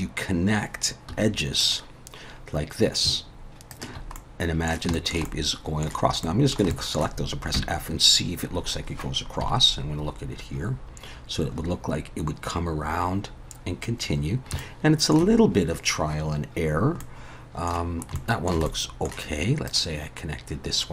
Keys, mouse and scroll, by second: 1.1 2, 1.6 click, 3.7 shift+click, 4.2 middle click, 4.9 shift+middle click, 5.3 middle click, 6.2 middle click, 6.7 shift+middle click, 7.5 f, 9.4 KP_7, 10.3-11.0 scroll up 4, 14.6 shift+middle click, 17.0 middle click, 17.8 scroll down 4, 18.1 shift+middle click, 18.7 middle click, 19.7 click.